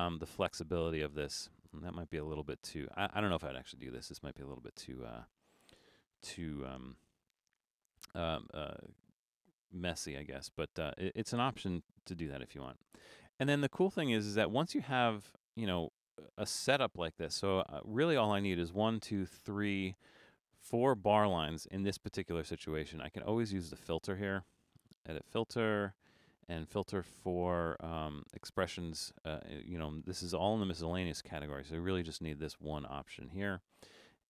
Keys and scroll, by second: 6.7 BackSpace, 8.1 BackSpace, 11.8 BackSpace, 17.2 BackSpace.